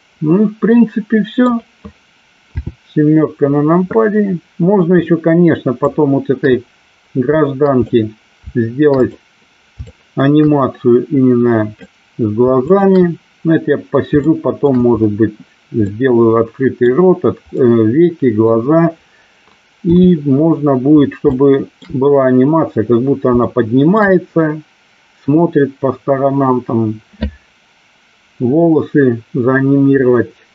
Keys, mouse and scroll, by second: 2.6 KP_7, 5.9-8.0 shift+drag, 9.2 click, 10.2-12.0 shift+drag, 12.8 shift+click, 14.3 shift+middle click, 16.0 middle click, 17.6 middle click, 19.9 KP_7, 21.4 shift+middle click, 23.6 shift+middle click.